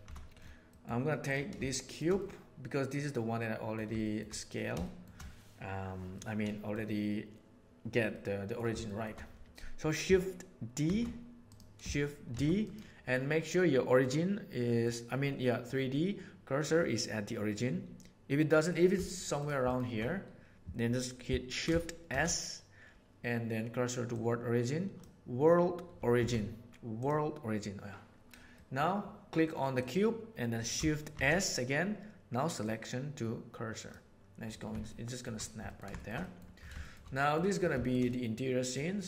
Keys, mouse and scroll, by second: 0.6 middle click, 1.6-1.9 shift+middle drag, 2.1-3.6 middle drag, 3.9 shift+middle click, 4.8 shift+middle click, 6.1-6.7 middle drag, 8.1-8.4 middle drag, 8.8 shift+middle click, 10.8 shift+s, 12.3 shift+d, 14.0-14.6 middle drag, 22.0 shift+s, 26.1 shift+s, 34.8-35.2 shift+middle drag, 35.6 ctrl+middle click, 35.9 shift+middle click, 36.1 middle drag, 36.7 shift+middle click, 37.1 middle click, 38.0-38.7 middle drag.